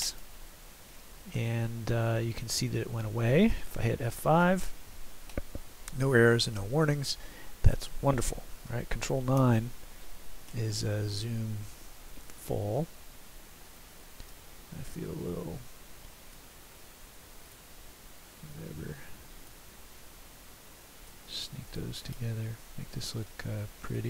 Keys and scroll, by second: 4.5 F5, 9.4 ctrl+9.